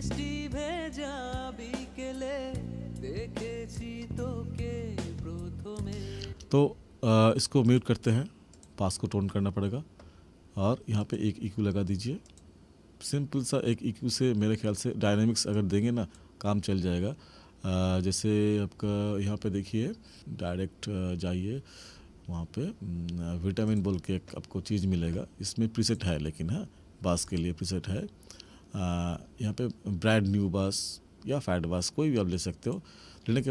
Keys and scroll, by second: 6.2 space.